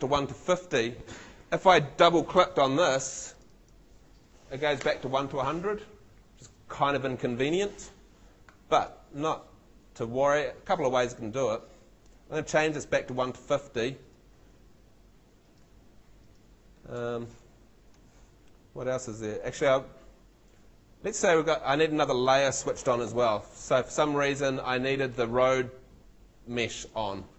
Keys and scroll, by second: 23.1 shift+super+l.